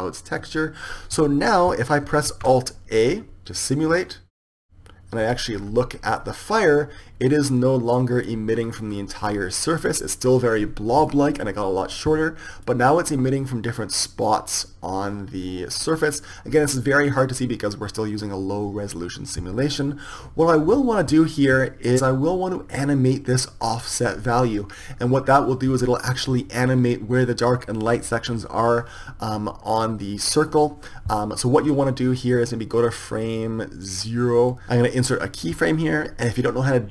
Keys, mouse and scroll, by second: 2.3 alt+a, 5.6-12.2 middle drag, 13.0-16.1 middle drag, 16.3 middle click, 19.3 middle click, 21.1 Escape.